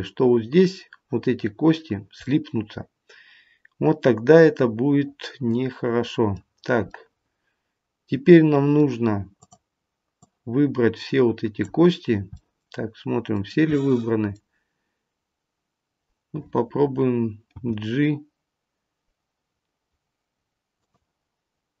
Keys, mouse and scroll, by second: 2.2 middle click, 6.9 middle click, 9.3 click, 10.1 click, 12.2 middle click, 13.7 middle click, 17.6 g.